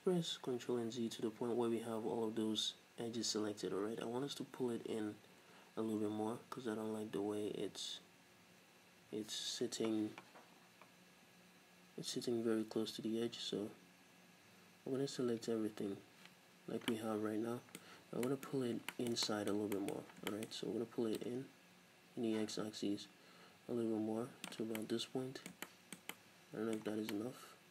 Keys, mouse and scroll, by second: 1.4 ctrl+z, 16.3 z, 17.0 middle click, 17.9 z, 18.6-19.0 scroll up 2, 18.8-21.2 shift+middle drag, 20.0-20.4 scroll up 2, 21.2-24.8 drag, 24.8-27.1 middle drag, 27.0 scroll down 2, 27.2-27.7 middle drag.